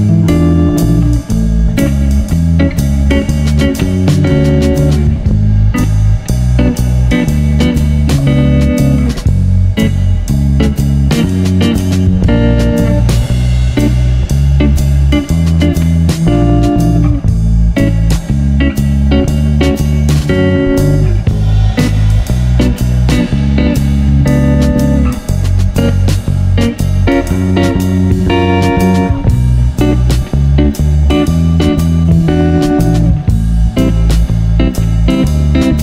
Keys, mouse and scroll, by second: 0.4 alt+c, 1.0 Tab, 1.4 a, 1.5 a, 1.6 a, 1.8 e, 2.9 z, 3.1 a, 3.3 b, 4.4 Tab, 4.9 Tab, 5.0 a, 5.1 a, 5.2 s, 6.5 Tab, 6.7 z, 7.3 Tab, 7.8 s, 8.5 Tab, 10.4 shift+d, 11.9 shift+r, 13.1-14.4 drag, 14.5 click, 17.2 right click, 17.9 middle click, 19.3 click, 20.1-22.7 middle drag, 23.0-24.2 drag, 25.0 middle click, 25.2-26.4 drag, 25.2 g, 26.7 middle drag, 28.1-29.2 right drag, 29.6 right click, 29.6 click, 31.9-33.4 right drag, 33.9-34.2 middle drag, 35.4 right click.